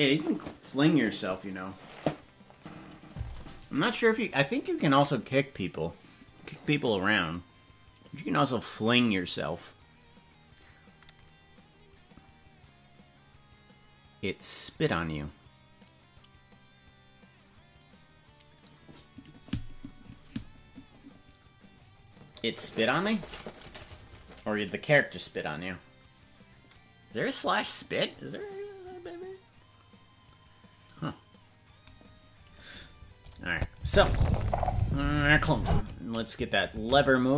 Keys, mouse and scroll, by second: 33.5 click, 33.8 space, 35.7 space, 36.7 ctrl+Tab.